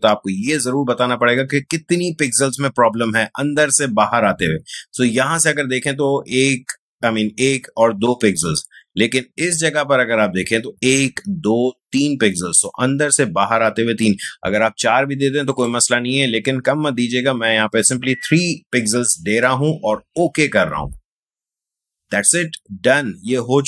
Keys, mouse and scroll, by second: 15.5 click, 16.8-19.0 scroll up 1, 21.2 click.